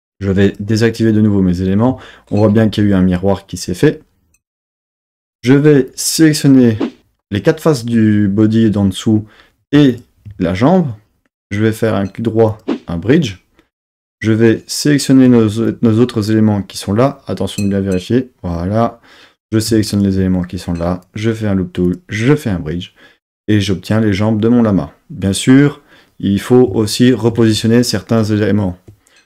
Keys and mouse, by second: 0.0 click, 4.5 Tab, 5.3 3, 5.9 click, 9.9 shift+click, 11.4 right click, 15.6 click, 18.6-19.7 drag, 19.9 shift+click, 20.9-22.0 right drag.